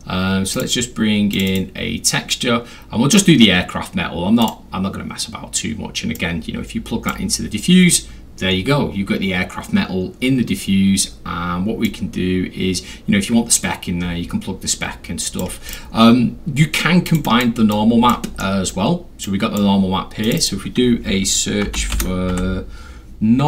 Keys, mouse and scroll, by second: 0.5 click, 1.3 click, 1.5 click, 3.1 click, 4.4 click, 6.2-7.1 drag, 8.5 middle click, 8.5 scroll, 11.9-15.4 drag, 15.7 click, 17.1 click, 17.2 click, 17.7 click, 18.4 middle click, 19.2 click, 20.2 click, 20.4 click, 21.7 n, 22.0 r, 22.8 m.